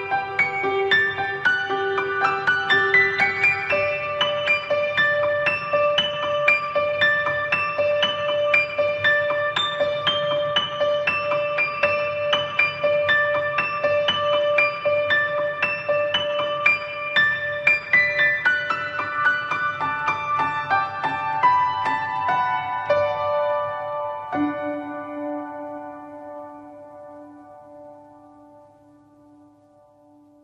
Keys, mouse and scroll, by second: 0.2 ctrl+Tab, 3.9 middle click, 4.7 click, 5.2 ctrl+middle click, 5.7 shift+middle click, 6.0 ctrl+middle click, 6.3 r, 6.4 right click, 6.5 right click, 6.5 r, 6.6 r, 6.8 ctrl+right click, 7.5 shift+right click, 8.0 middle click, 9.0 right click, 9.3 f, 10.5 click, 12.2 right click, 12.7 click, 13.1 middle click, 13.6 ctrl+right click, 14.1 right click, 15.1 click, 16.9 click, 18.6 right click, 19.0 ctrl+right click, 19.3 click, 22.4 ctrl+right click, 22.9 right click, 23.3 click, 25.7 click, 26.8 ctrl+right click, 27.3 shift+right click, 27.6 right click, 28.0 click, 28.3 click, 29.1 click.